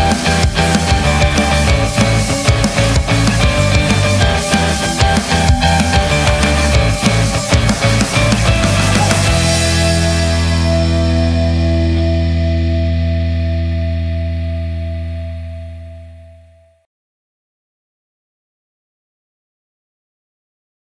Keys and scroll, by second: 0.0 super+z.